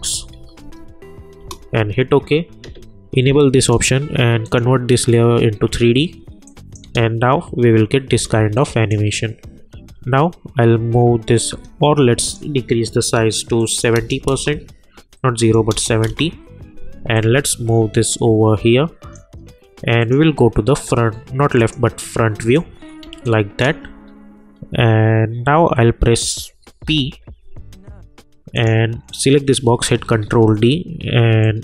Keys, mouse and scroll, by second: 0.0-0.6 typing, 1.4 Return, 3.6 click, 6.8 space, 8.5-11.3 drag, 11.5 s, 12.2 click, 14.2 Return, 15.4 click, 16.0 Return, 17.1-20.2 drag, 23.0 space, 23.2 click, 23.5 space, 24.0 alt+scroll down 1, 24.2-24.5 alt+scroll up 1, 24.5-25.0 alt+scroll down 1, 25.0-25.5 alt+scroll up 1, 26.3 click, 26.8 p, 28.5 click, 30.0 ctrl+d, 31.4-31.6 drag.